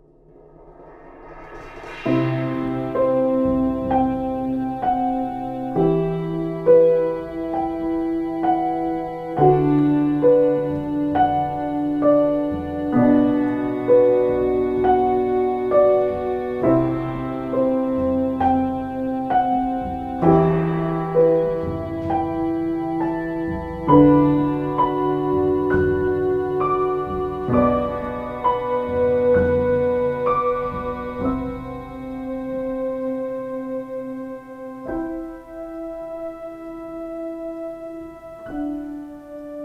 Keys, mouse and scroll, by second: 29.9 space, 30.7 ctrl+space, 31.3 space, 31.9 ctrl+space, 33.1 ctrl+space, 33.9 space, 34.7 ctrl+space, 39.1 ctrl+z.